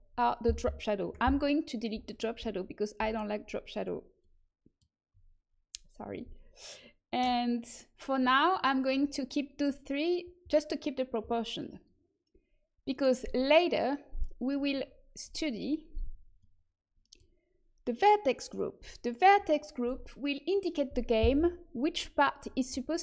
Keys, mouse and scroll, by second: 0.4-4.1 drag, 2.9 Delete, 4.1 middle click, 6.1-12.9 middle drag, 12.9-15.5 right drag, 14.7 Tab, 15.5 Tab, 16.3-18.4 middle drag, 18.4-21.8 drag.